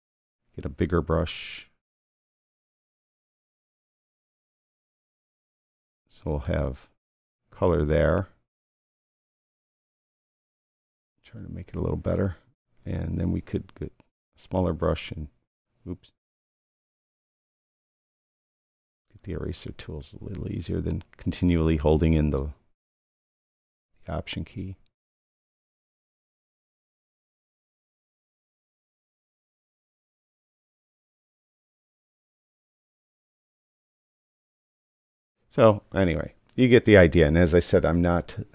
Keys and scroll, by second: 0.8 alt+], 2.0 alt+], 13.8 [.